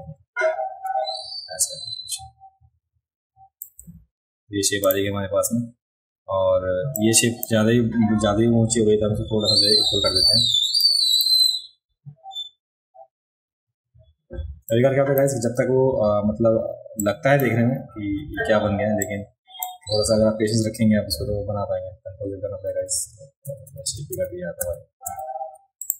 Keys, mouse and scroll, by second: 4.9 drag, 7.0-7.4 drag, 10.8 click, 14.7 click, 17.0 click, 19.0-19.6 drag, 22.7 ctrl+z, 23.0 ctrl+z, 23.5 ctrl+z, 23.7 ctrl+z, 23.9 ctrl+z, 24.1 ctrl+z, 24.6 ctrl+z, 25.1 ctrl+z, 25.8 click.